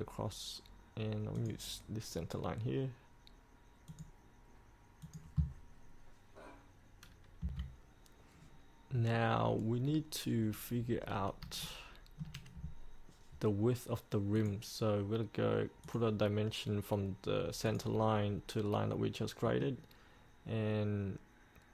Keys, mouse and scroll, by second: 7.6 F8, 8.7-9.0 scroll up 1, 9.0 scroll down 1, 9.6 scroll up 1, 10.0 scroll down 1, 11.2 scroll up 1, 11.8 shift+middle click, 14.5 click, 19.6 middle click.